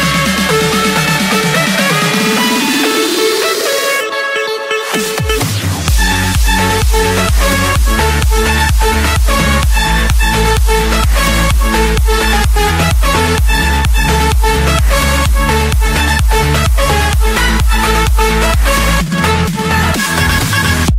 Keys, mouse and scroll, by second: 1.4 click, 1.7-2.5 scroll down 8, 2.9 scroll down 1, 3.1-3.4 scroll up 2, 3.4-4.7 scroll, 6.6 click, 7.0 middle click, 7.1 middle click, 7.7 middle click, 8.2 middle click, 8.3 Escape, 10.4 click, 12.1-13.1 drag, 13.8-15.0 typing, 16.1 Return, 18.3-19.4 drag, 20.4-20.9 typing.